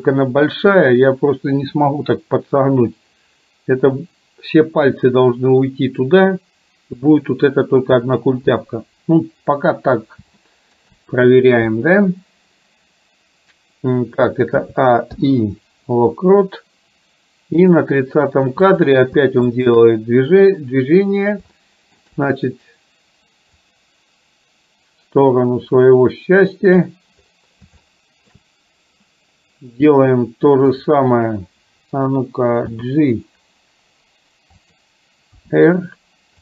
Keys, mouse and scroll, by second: 10.5 shift+middle click, 17.7 click, 19.6 shift+click, 21.6 shift+middle click, 23.7-26.9 drag, 27.9-28.4 shift+middle drag, 30.9 click, 32.9 g, 35.5 r.